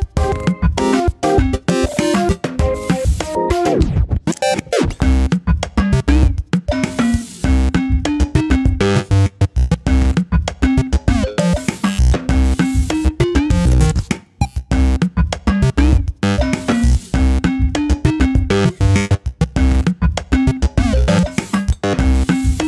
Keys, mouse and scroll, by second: 0.4 Tab, 1.2 scroll down 1, 1.5 middle click, 2.4 ctrl+r, 4.9 middle click, 5.8 `, 6.3 `, 7.0-7.8 scroll up 2, 7.8 ctrl+r, 12.4 ctrl+r, 16.9 ctrl+r, 19.6 ctrl+r.